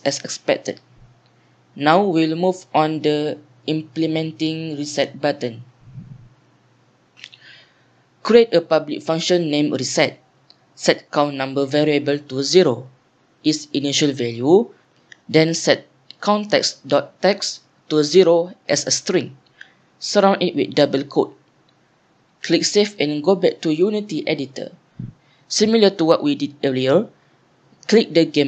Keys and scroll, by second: 7.7-11.6 typing, 12.6 Down, 12.7 Tab, 14.6-20.2 typing, 15.7 Down.